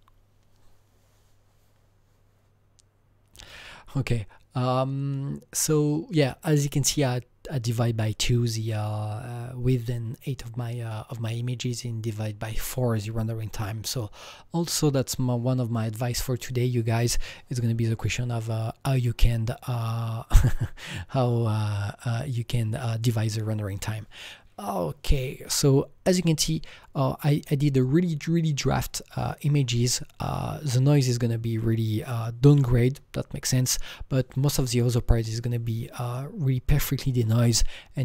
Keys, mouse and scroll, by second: 26.4-30.3 drag, 29.9-30.9 scroll up 6, 30.9-32.8 scroll down 3, 33.2-34.0 scroll down 2, 34.0-34.6 scroll down 1, 34.6 click, 36.4-36.9 scroll up 1, 36.9-38.0 scroll down 5.